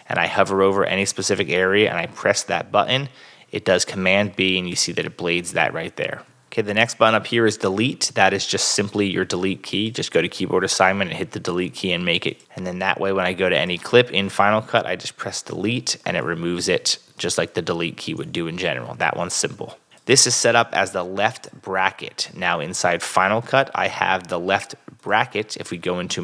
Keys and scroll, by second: 3.5 super+b, 16.0 BackSpace, 16.8 super+BackSpace, 17.0 super+z, 18.2 super+Tab.